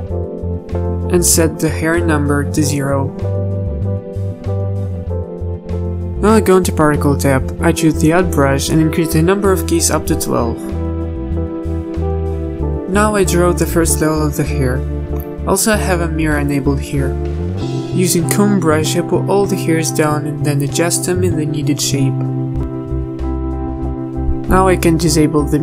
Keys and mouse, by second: 5.5 click, 16.7-18.3 drag, 18.3 ctrl+z, 18.3 a, 18.3 KP_3, 19.9 z, 20.8-22.0 drag, 22.3 KP_3, 22.9 z, 25.5 z.